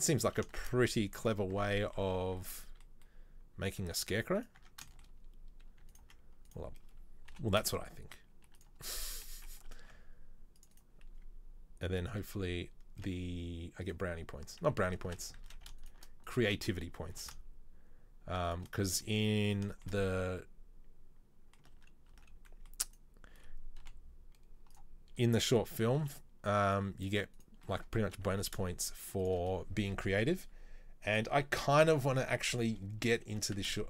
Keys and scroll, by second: 0.3 s, 1.7 Tab, 7.4 i, 10.0 ctrl+r, 14.9 ctrl+z, 15.1 ctrl+z, 15.5 ctrl+z, 17.3 e, 21.9 ctrl+z, 22.3 ctrl+z, 23.9 i, 26.1 s, 28.5 e, 33.3 g.